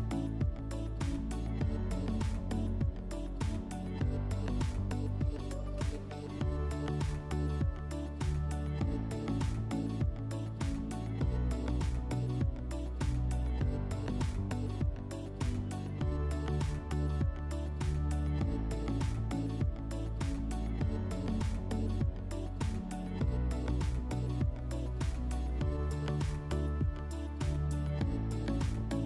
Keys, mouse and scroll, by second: 1.0 click, 1.6-2.8 drag, 3.8 click, 4.6 click, 5.8 click, 6.0 click, 6.8 typing, 7.6 Tab, 8.1-8.9 typing, 9.2 Return, 13.7 click, 14.7 alt+w, 16.0 scroll, 16.8 click, 20.3 s, 22.1 click, 24.3-25.7 drag, 28.7 click.